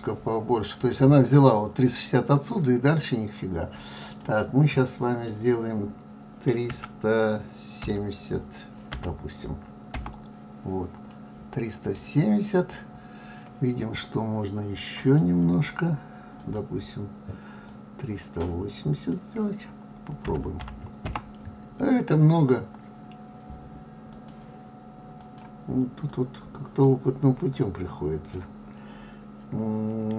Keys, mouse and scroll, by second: 11.6-13.2 middle drag, 13.2 scroll up 1, 15.5 click, 24.6 click.